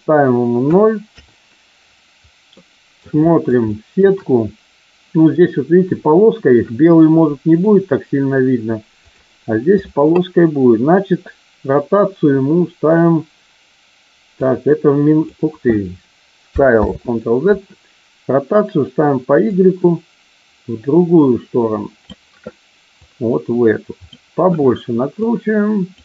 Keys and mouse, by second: 2.4-2.9 middle drag, 3.2 shift+middle drag, 3.6-3.9 shift+middle drag, 7.4 click, 14.3-15.3 drag, 16.8 ctrl+z, 19.6-22.2 drag, 22.9-24.1 drag, 25.2 click.